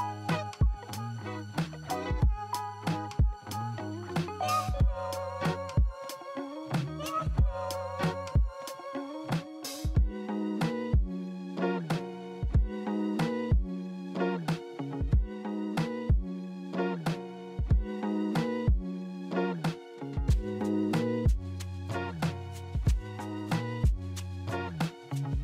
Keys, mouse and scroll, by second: 6.0 middle click, 6.5 middle click, 9.6 middle click, 15.4 e, 17.1 right click, 18.7 right click, 19.7 alt+middle click.